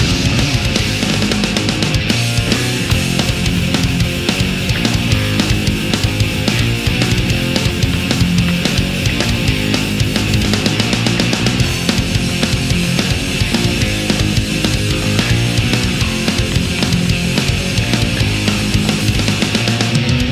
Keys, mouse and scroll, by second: 0.3-2.2 drag, 3.2 a, 5.0 click, 6.0 space, 7.9 k, 8.0 n, 8.2 i, 9.5 click, 10.8 click, 13.9 click, 14.6 Return, 16.3 click, 18.2 right click, 18.8 shift+right click, 19.5-20.3 shift+drag.